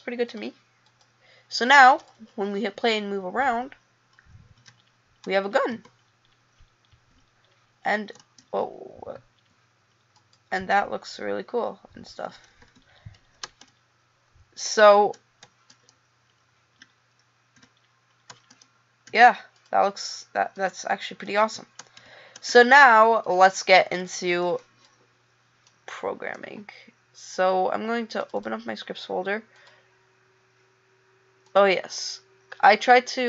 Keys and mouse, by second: 29.3 click, 31.4 right click.